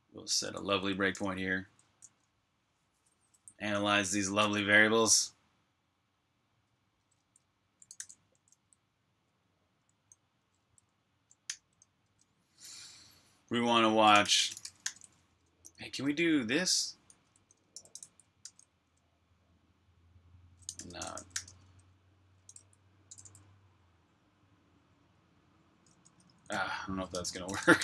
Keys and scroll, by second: 0.0-1.6 typing, 2.7-3.4 typing, 4.7-5.5 typing, 7.4-8.7 typing, 11.4 i, 13.8-18.3 typing, 20.5-23.0 typing, 25.1-27.8 typing.